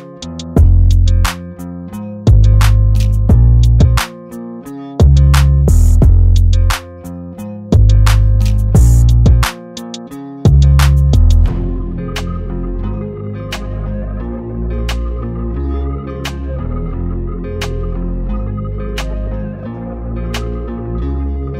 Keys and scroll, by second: 0.0 Return, 3.5 Return, 5.7 Return, 6.1 space, 10.6 m, 12.5 Return, 16.5 r.